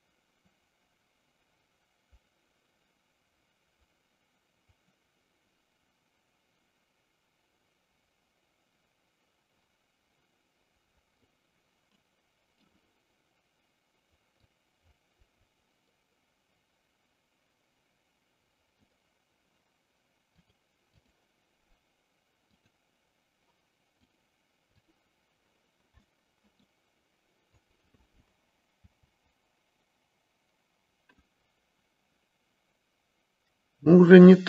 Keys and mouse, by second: 12.0 middle click, 14.5-18.9 drag, 20.3 click, 22.4 click, 24.1 click, 26.0-26.8 middle drag, 27.5 click, 29.0 g.